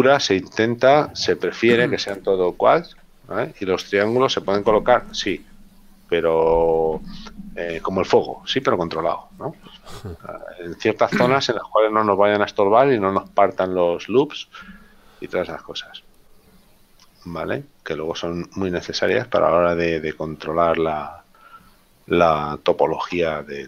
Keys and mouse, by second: 12.0 middle click, 17.3 middle click.